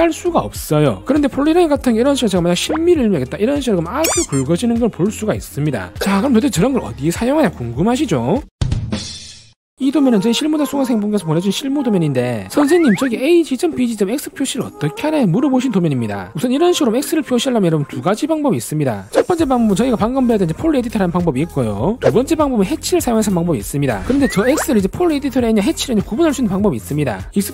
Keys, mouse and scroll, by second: 3.1 1.